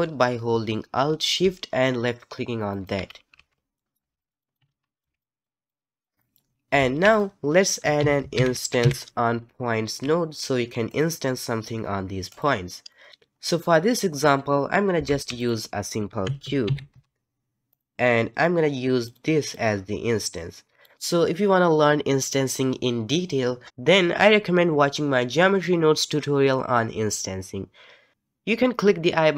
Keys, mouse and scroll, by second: 2.7 alt+shift+click, 3.4 alt+a, 3.7 middle click, 4.1 alt+a, 4.2 middle click, 4.4 click, 4.6 g, 5.0 alt+a, 5.2 click, 5.7 click, 6.1 shift+a, 6.8 shift+a, 12.9 middle click, 15.1 shift+a, 19.5-20.9 drag.